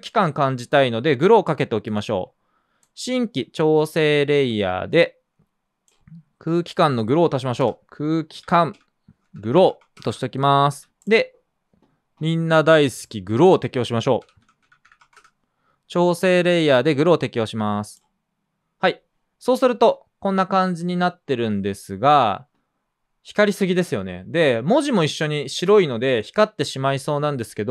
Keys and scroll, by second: 7.6-10.6 typing, 10.7 super+s, 13.9-15.6 typing.